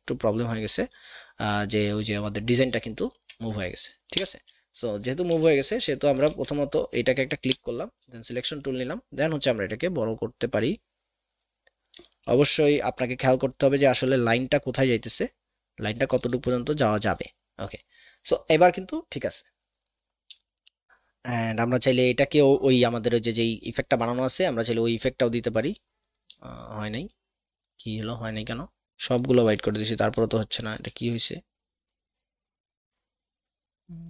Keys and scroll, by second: 3.2 a, 4.1 v, 5.3 ctrl+KP_2, 6.3 a, 7.5 v.